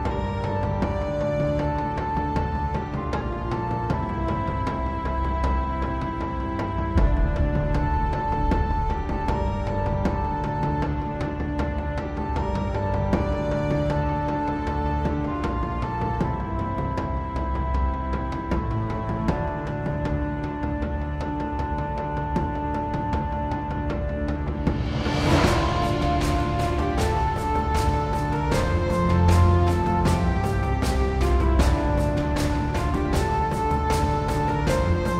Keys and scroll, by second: 7.8 super+z, 25.7 super+z.